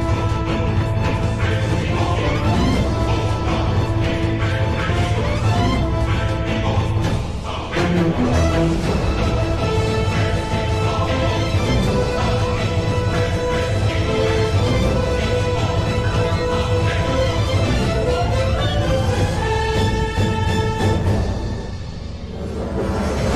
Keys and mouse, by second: 4.0 click, 5.2 z, 5.9 click, 10.0 g, 14.9 z, 16.0 Tab, 17.0-18.0 middle drag, 18.3-19.5 middle drag, 20.7 KP_7.